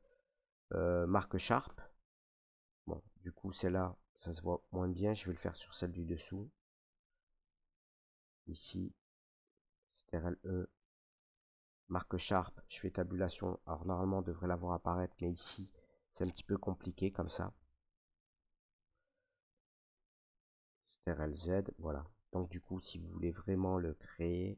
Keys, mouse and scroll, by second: 1.3 click, 1.6 Tab, 2.8 Tab, 3.4 ctrl+z, 4.3 ctrl+z, 4.7 ctrl+z, 5.7 middle click, 6.8 shift+middle click, 7.0 shift+right click, 8.3 right click, 9.2 ctrl+right click, 10.0 ctrl+e, 11.8 click, 12.2 Tab, 14.0 middle click, 16.6 middle click, 16.9 scroll, 17.2 Tab, 17.9 ctrl+e, 19.7 ctrl+z, 20.2 ctrl+z, 20.2 middle click, 20.5 ctrl+z, 21.2 ctrl+z, 22.0 Tab.